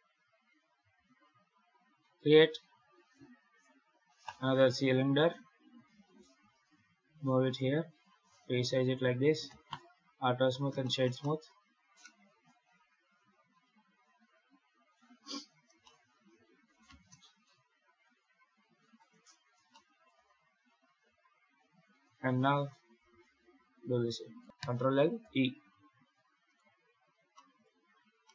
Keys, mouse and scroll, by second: 0.8 shift+a, 5.8 g, 7.5 s, 8.6 z, 9.3 q, 10.1-10.5 scroll up 3, 10.7 shift+middle click, 11.1 middle click, 11.9-12.3 scroll down 1, 12.3 KP_7, 13.0 g, 15.4-15.7 scroll down 4, 15.7 shift+middle click, 16.2-16.6 scroll up 3, 16.6 g, 19.6 shift+middle click, 24.3 shift+right click, 24.4 ctrl+l, 26.3 right click, 26.8 scroll up 1, 27.2 shift+middle click, 27.8 scroll down 1, 28.1 middle click.